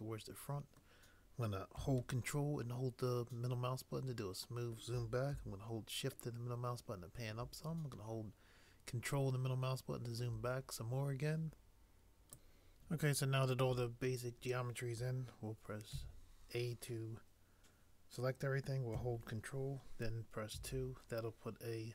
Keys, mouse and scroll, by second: 15.9 a, 20.5 ctrl+2.